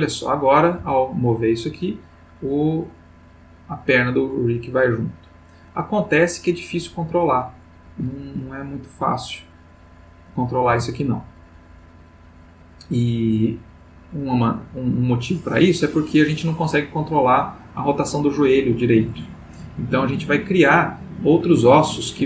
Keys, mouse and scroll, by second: 0.0 click, 0.8 g, 7.8 Escape, 9.7-10.2 drag, 10.7 g.